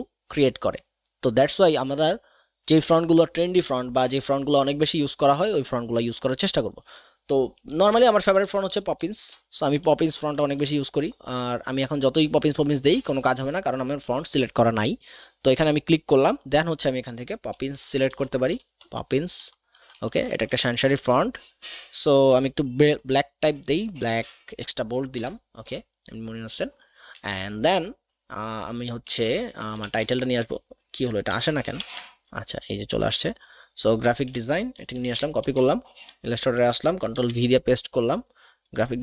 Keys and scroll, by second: 8.3 p, 8.4 o, 8.7 p, 8.8 p, 9.6 Down, 9.8 Down, 10.0 Down, 10.2 Down, 10.4 Down, 10.6 Down, 17.9 p, 18.1 o, 18.5 p, 18.6 p, 19.4 Down, 19.7 Down, 19.9 Down, 20.1 Down, 20.3 Down, 20.9 Down, 22.3 Down, 22.5 Down, 22.7 Down, 22.8 Down, 23.0 Down, 23.9 Down, 25.1 Return, 29.1 alt+Tab, 29.7 alt+Tab, 31.3 alt+Tab.